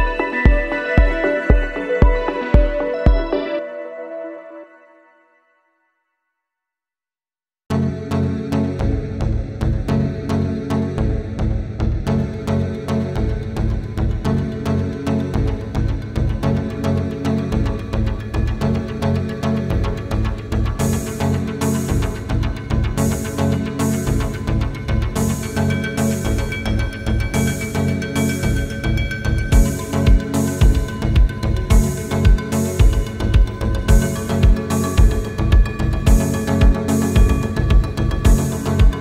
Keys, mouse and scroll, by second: 0.0 scroll down 1, 0.6 scroll up 1, 0.8 scroll down 1, 1.0 middle click, 1.3-1.8 scroll up 1, 1.8 middle click, 2.3-2.7 scroll up 1, 2.9 typing, 8.4 Return, 9.2 typing, 10.1 Return, 11.0 scroll down 1, 11.2 middle click, 11.5 space, 12.2 double click, 12.6 right click, 14.5 typing, 15.9 typing, 16.0 scroll down 1, 16.5 scroll up 1, 17.0 space, 17.3-17.7 scroll down 1, 17.7 double click, 22.5 Return, 23.2 typing, 35.2 middle click, 35.8 scroll down 1, 36.4 scroll up 1, 37.3 scroll down 1, 37.6 space, 38.0 scroll down 1.